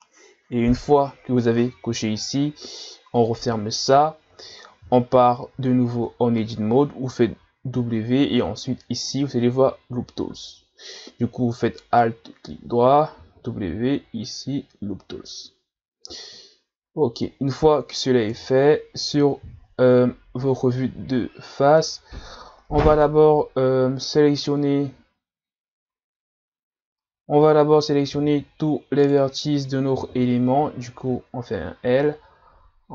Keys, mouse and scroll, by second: 4.8-5.8 scroll down 1, 5.8 scroll down 2, 5.9 Tab, 7.8 w, 11.8 alt+right click, 13.2 w, 16.2-18.3 middle drag, 18.3 KP_1, 19.9-20.5 shift+scroll up 1, 22.9 right click, 29.0 right click, 30.0 l.